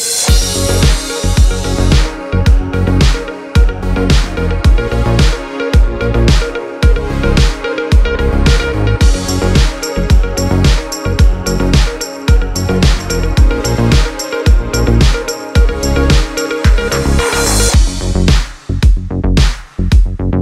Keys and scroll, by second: 13.8 x, 18.0 space.